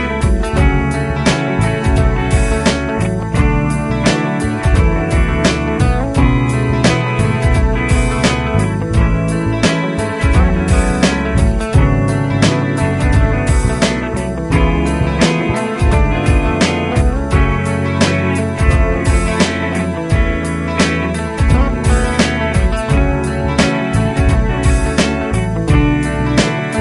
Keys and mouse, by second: 2.0 double click, 3.9 shift+click, 9.1 shift+click, 14.3 ctrl+click, 17.3 ctrl+click, 19.4 Right, 19.7-20.8 Right, 22.1 Right, 23.9 ctrl+click, 25.9 ctrl+click.